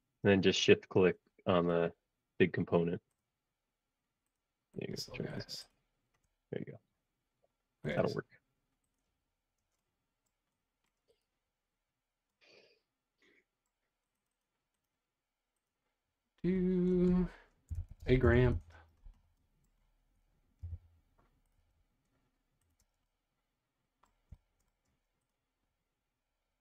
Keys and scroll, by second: 9.7 space, 17.4-18.8 typing, 20.0-20.6 typing, 22.8 space, 24.8 space.